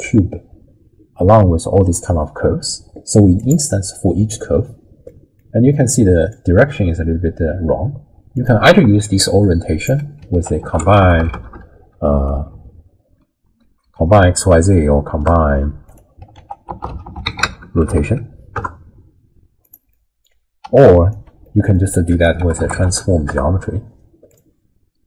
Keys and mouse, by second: 3.4 click, 5.1 click, 5.7-6.3 middle drag, 8.3 click, 8.8 d, 9.0 click, 9.9 d, 10.3 ctrl+a, 12.5 Down, 12.6 Down, 13.8 Up, 16.4 ctrl+a, 19.9 middle click, 20.6 d, 20.8 click, 21.1 d, 21.2 d, 21.4 click, 22.1 ctrl+a.